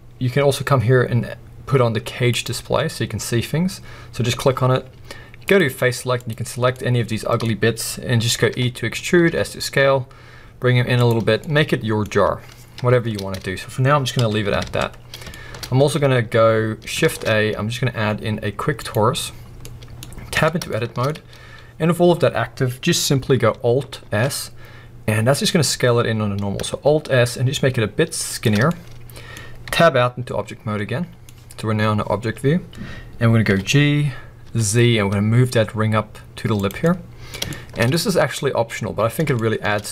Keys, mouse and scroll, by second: 2.4 click, 5.5 click, 6.1 click, 6.8-11.1 middle drag, 9.0 e, 11.1 click, 11.2 scroll down 2, 11.4 middle click, 12.0-12.8 scroll up 2, 12.8 Tab, 14.1 KP_1, 14.6 alt+a, 15.0 scroll down 2, 15.3 shift+middle click, 15.6-17.0 scroll up 2, 17.0 shift+a, 19.6 middle click, 20.3 Tab, 20.3-36.6 middle drag, 21.1-24.0 scroll up 2, 24.0 alt+s, 28.4 shift+click, 28.5 scroll down 2, 29.6 Tab, 32.3 scroll up 2, 33.4 g, 36.6 click, 36.8-39.9 middle drag, 37.9-38.3 scroll up 2, 39.3-39.9 shift+scroll up 2.